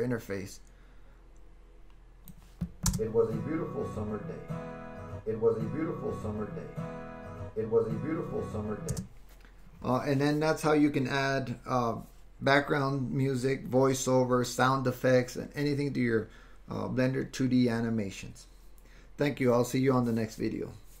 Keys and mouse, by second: 0.0-2.4 drag, 2.9 space, 8.9 space.